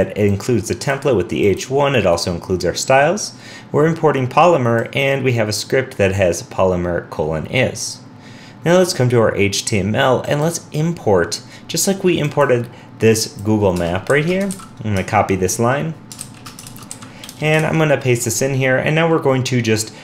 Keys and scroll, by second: 14.5 super+v, 16.8 super+c, 17.6 super+v.